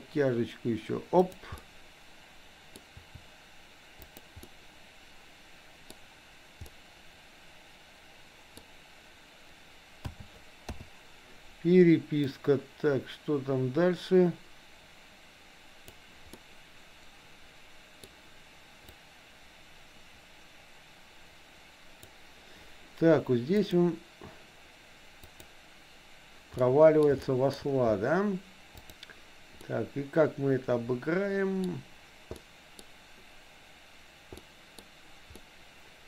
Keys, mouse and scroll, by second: 1.6-2.7 middle drag, 2.7 scroll down 1, 2.9 r, 4.4-5.9 middle drag, 6.7-8.6 middle drag, 8.6-10.2 scroll down 1, 10.2 a, 11.1 i, 13.1-16.9 drag, 17.1-18.2 middle drag, 19.6-22.2 drag, 23.6 click, 25.3 click, 26.7 middle click, 27.2 shift+middle click, 28.8 click, 29.7-31.7 middle drag, 32.4 middle click, 34.4 middle click, 35.4 middle click.